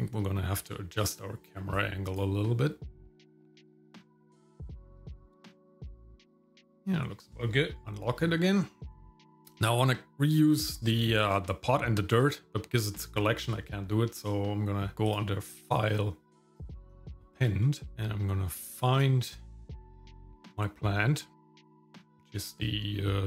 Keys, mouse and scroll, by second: 1.0 click, 1.7 click, 2.9 middle click, 3.2 click, 3.4 middle click, 3.8 ctrl+middle click, 4.0 middle click, 4.2 shift+middle click, 5.0 middle click, 5.5-6.6 shift+middle drag, 7.8 click, 15.0-17.2 drag.